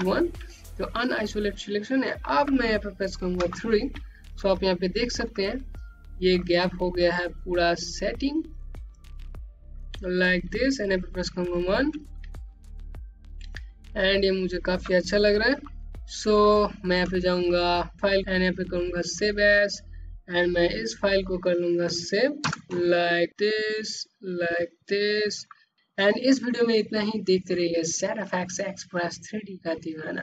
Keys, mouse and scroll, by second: 0.3 ctrl+1, 0.9 scroll up 1, 1.5 alt+click, 3.9 3, 4.7 scroll down 1, 4.9 click, 6.9 click, 11.8 1, 12.5 scroll down 1, 13.0 alt+click, 14.5-16.3 typing, 18.4 click, 22.7 KP_8, 23.9 click.